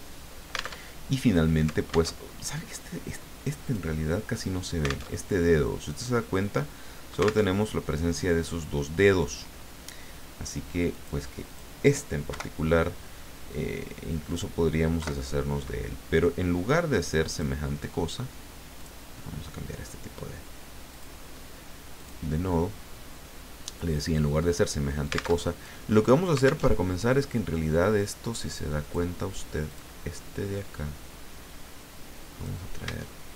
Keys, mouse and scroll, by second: 0.8 alt+Tab, 2.2 alt+Tab, 3.6 click, 5.1 alt+Tab, 7.5 alt+Tab, 10.9 click, 11.5 click, 12.3 Delete, 14.3 click, 15.0 Delete, 17.3 click, 18.8 click, 20.9 click, 22.0 click, 25.4 alt+Tab, 26.7 alt+Tab, 28.8 click, 29.7 click, 30.5-32.7 drag.